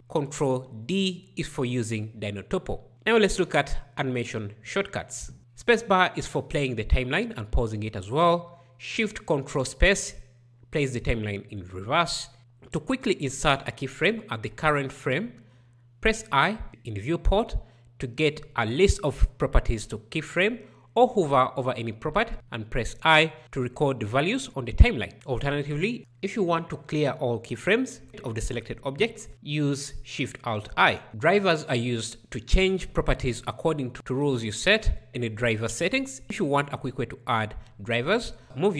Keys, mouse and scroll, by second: 0.0 ctrl+b, 5.4 space, 8.6 ctrl+shift+space, 12.4 i, 27.9 alt+shift+i, 32.4 ctrl+d.